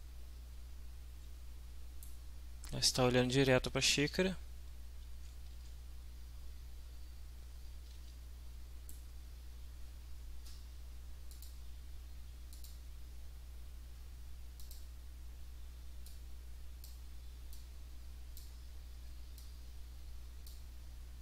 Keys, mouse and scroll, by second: 3.5 right click, 4.1 right click, 4.6 right click, 5.0 w, 5.4 right click, 6.8-7.9 right drag, 7.9 w, 8.1 right click, 11.3 click, 12.5 click, 14.6 click, 16.1 click, 17.5-18.6 drag, 19.4-20.7 drag.